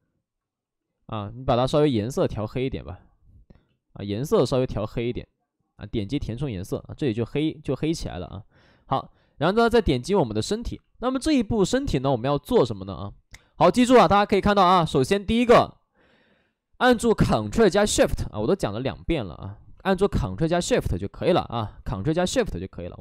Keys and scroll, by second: 2.4 ctrl+z, 2.7 ctrl+z, 9.3 alt+s, 18.9 ctrl+z, 20.7 ctrl+z, 21.8 ctrl+z.